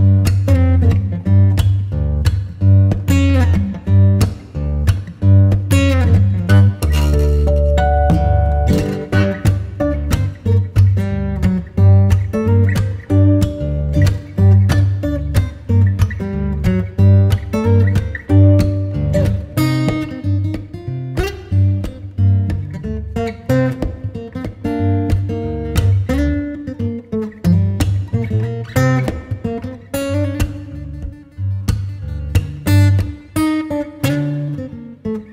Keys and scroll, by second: 1.1 Escape, 3.9 F4, 4.8 Escape, 9.9 shift+Page_Up, 12.4 Escape, 16.3 F2, 17.1 Escape, 18.4 c, 21.8 shift+Page_Up, 24.0 c, 25.9 F4, 26.8 F2, 35.0 g.